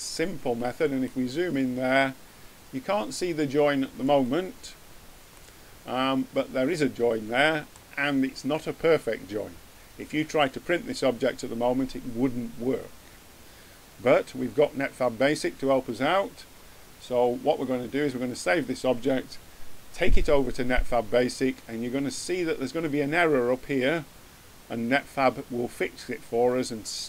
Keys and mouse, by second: 4.7 middle click, 5.8 middle click, 6.7 middle click, 15.7-20.9 middle drag.